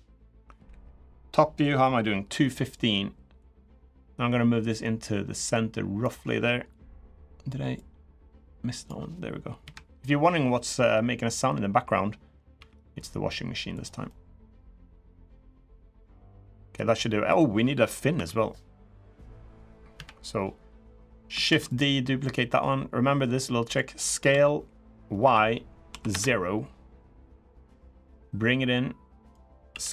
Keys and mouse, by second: 0.4 KP_1, 3.1-5.8 drag, 7.6-8.6 drag, 9.4 KP_3, 12.3 g, 13.8-15.8 middle drag, 16.2 middle click, 17.9 3, 18.8 click, 19.7 KP_3, 21.2 shift+d, 22.0 middle click, 23.2 click, 24.0 s, 27.3-29.1 drag, 29.4 s.